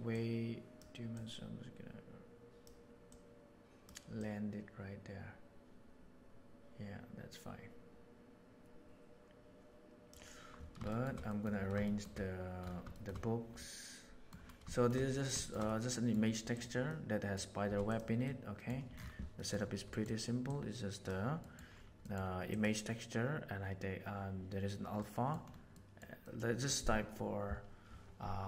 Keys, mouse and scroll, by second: 0.1 right click, 1.1-2.6 right drag, 3.0 click, 4.2-10.1 drag, 10.8 shift+middle click, 11.2 middle click, 11.8 shift+middle click, 12.9 shift+middle click, 13.5-14.3 middle drag, 14.7 shift+middle drag, 15.4 shift+middle click, 15.6-16.1 middle drag, 16.5 right click, 16.8-17.2 middle drag, 17.8 right click, 17.9 click, 18.2-18.6 middle drag, 19.3 middle click, 19.9 middle click, 20.5 click, 21.4 middle click, 22.0 middle click, 22.4 click, 25.0 middle click, 25.7 middle click.